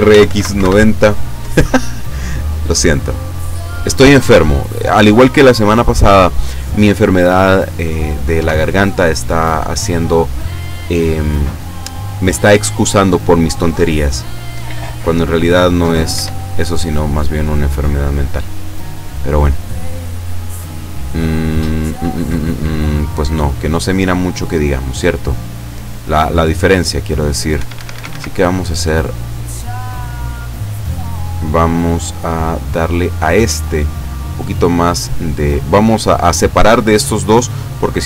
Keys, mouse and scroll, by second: 0.2 x, 0.3 KP_9, 0.4 KP_0, 0.7 KP_Enter, 2.7-4.4 drag, 4.7 middle click, 5.4-7.5 drag, 8.4 KP_0, 16.2 F12, 27.6 Escape, 28.4 middle click, 29.1 scroll down 1, 29.6-31.8 middle drag, 34.2 click.